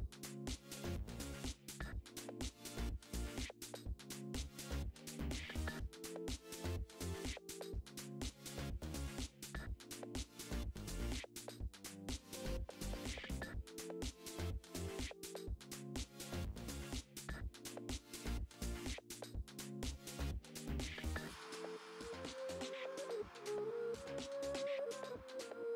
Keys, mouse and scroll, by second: 0.0 alt+d, 1.2 click, 1.4 KP_7, 1.7 shift+middle click, 2.0-2.3 scroll up 1, 2.3 g, 2.6 click, 3.6 click, 3.8 KP_0, 4.7 middle click, 4.7 scroll up 2, 4.9 click, 5.0-6.3 middle drag, 5.7 KP_0, 6.3 click, 6.6-8.3 shift+middle drag, 8.3 click, 9.3-12.1 shift+middle drag, 9.5 scroll up 2, 9.9 KP_7, 10.3-11.1 scroll up 2, 12.1 KP_7, 12.3 alt+d, 12.7 click, 13.2 click, 13.3 middle click, 13.8 r, 14.3 click, 14.4 g, 14.8 click, 14.9 middle click, 15.3 r, 15.8 click, 15.9-22.8 middle drag, 17.1 KP_7, 17.8 alt+d, 18.5 KP_7, 19.0 scroll up 1, 19.5 g, 20.4 scroll down 1, 21.7 r, 22.8 click, 22.9-24.0 middle drag, 23.3 KP_0, 24.0 click, 24.0 scroll down 2, 24.3 scroll up 1, 24.6-25.7 shift+middle drag.